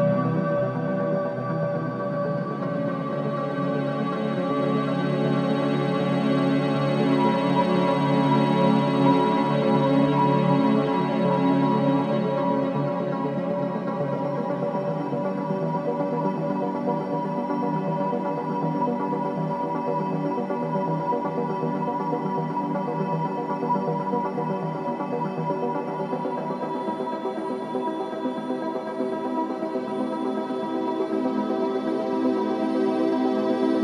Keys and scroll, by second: 5.7 5, 6.1 Return, 32.8 space.